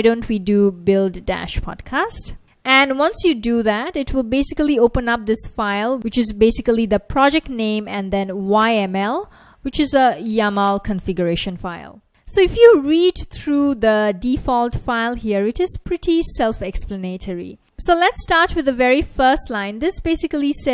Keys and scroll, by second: 0.0-2.6 typing, 6.9 F1, 19.9 F1.